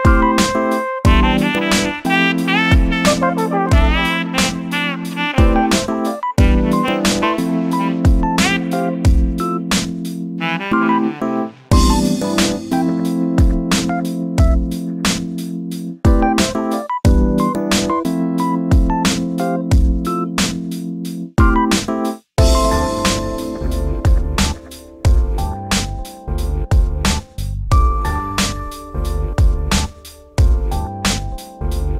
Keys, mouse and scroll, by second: 2.6 ctrl+z, 2.8 ctrl+z, 3.0 ctrl+z, 4.0 click, 5.2 g, 6.6 3, 7.0 click, 8.0 shift+d, 10.7 shift+r, 11.0 shift+r, 13.0 shift+d, 15.7 shift+middle click, 15.9-16.3 scroll up 2, 16.3 shift+d, 19.0 shift+r, 19.4 shift+r, 19.9 shift+middle click, 20.7 g, 22.3 click, 22.7 g, 23.7 click, 24.1 g, 25.2 click, 25.5 shift+click, 26.1 shift+click, 26.3 scroll down 2, 26.5 shift+middle click, 27.3 shift+d, 29.6 scroll down 3, 29.7-30.7 shift+middle drag, 30.7 click, 31.0 shift+click, 31.3 shift+click, 31.8 shift+d.